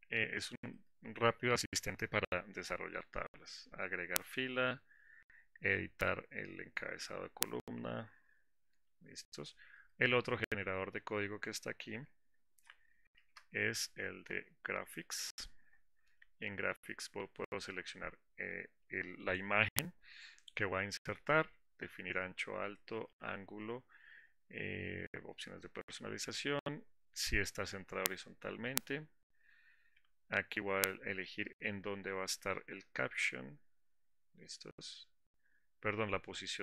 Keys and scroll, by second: 13.4 alt+Insert.